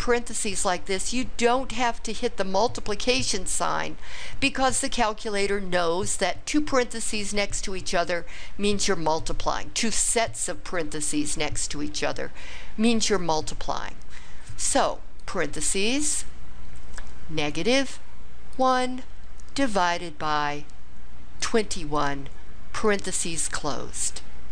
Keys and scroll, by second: 15.2 (, 19.1 1, 19.9 /, 21.4 2, 22.4 1, 22.9 ).